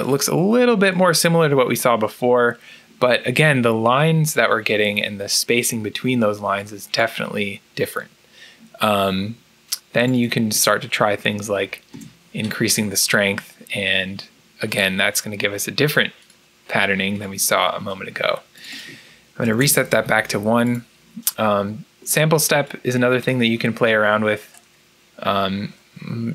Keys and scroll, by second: 11.3 5, 11.8 Return, 19.5 Return.